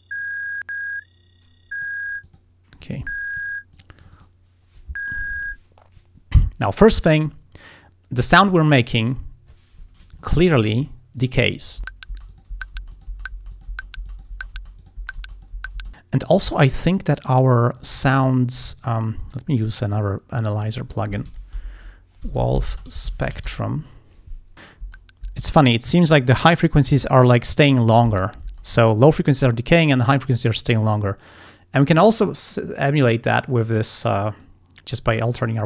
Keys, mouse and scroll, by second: 2.3 click, 2.7 click, 3.8 click, 8.6 click, 9.0 click, 10.3-10.7 ctrl+scroll up 1, 11.2 ctrl+click, 11.8 click, 11.8 space, 12.3 click, 12.9 click, 13.5 click, 14.1 click, 14.8 click, 15.3 click, 15.9 click, 16.5 click, 17.5 click, 18.2 click, 18.7 right click, 20.7 click, 20.9-24.9 typing, 28.4 space, 32.0 click, 33.1 click, 33.8 click, 35.2 click.